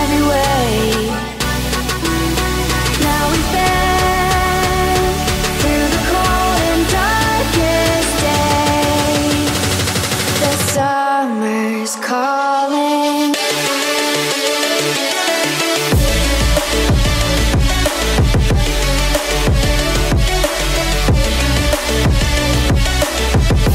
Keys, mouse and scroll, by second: 1.4 click, 2.9 click, 3.8 e, 5.1 click, 5.6 e, 7.6 z, 9.1 click, 9.6 click, 10.4 click, 10.9 click, 11.3 click, 12.2 r, 13.3 click, 13.9 ctrl+z, 14.6 click, 15.6 e, 18.1 click, 19.0 e, 19.6 z, 20.7 click, 21.8 click, 23.2 g.